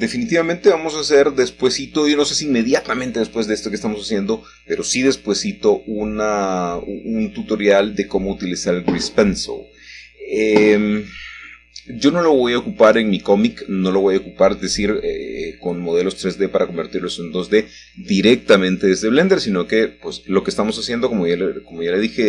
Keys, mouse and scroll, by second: 0.0 click, 2.5-3.6 middle drag, 3.6-4.5 scroll down 2, 4.5-6.1 middle drag, 6.1 Tab, 6.1 scroll down 1, 8.6 alt+h, 10.2 middle click, 10.5-12.1 scroll up 1, 11.2 middle click, 12.2 shift+middle click, 13.2 shift+middle click, 13.9 shift+middle click, 14.5-15.5 shift+middle drag, 15.5 click, 17.1 g, 18.0 z, 19.7 click, 20.8 click, 21.9 j.